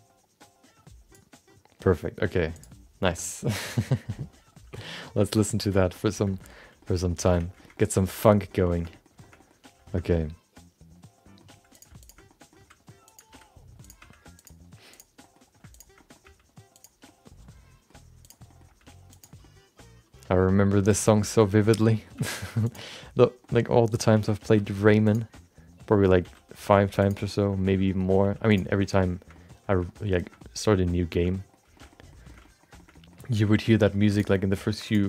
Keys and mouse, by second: 4.8 middle click, 5.2 shift+middle click, 5.9 middle click, 6.3 shift+middle click, 6.5 middle click, 6.8 shift+middle click, 6.9 middle click, 7.2 Tab, 7.5 shift+middle click, 7.7 middle click, 8.1 shift+middle click, 8.3 middle click, 8.7 middle click, 8.9 middle click, 9.2 middle click, 9.3 middle click, 9.8 middle click, 10.0-11.4 middle drag, 11.7 click, 12.0 shift+click, 12.2 middle click, 12.8 g, 13.3 r, 14.0 g, 14.9 click, 15.2 middle click, 15.7 shift+click, 15.9 middle click, 16.2 g, 17.2 middle click, 18.2 click, 18.4 middle click, 18.7 g, 19.5-20.7 middle drag, 20.9 click, 21.1 middle click, 21.4 shift+middle click, 21.6 middle click, 22.1 g, 23.0 middle click, 23.5 middle click, 24.1 r, 25.4 middle click, 26.2 r, 27.2 middle click, 27.6 middle click, 28.2 g, 28.9 middle click, 29.4 middle click, 29.9 middle click, 30.4 middle click, 31.2 middle click, 31.8 middle click, 32.3 middle click, 33.0 middle click, 33.6 middle click, 34.1 click, 34.3 middle click, 34.8 shift+click.